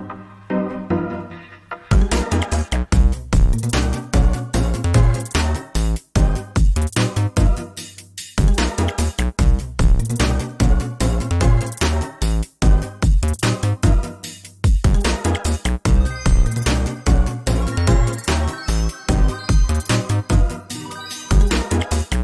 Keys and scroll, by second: 5.8 ctrl+space, 8.1 ctrl+space, 12.1 ctrl+space, 17.3 ctrl+space.